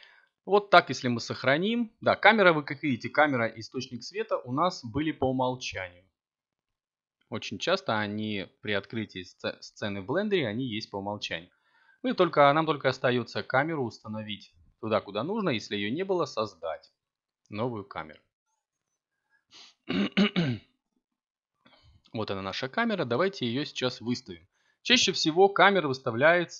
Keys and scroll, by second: 11.8 7, 13.8 g, 15.9 1.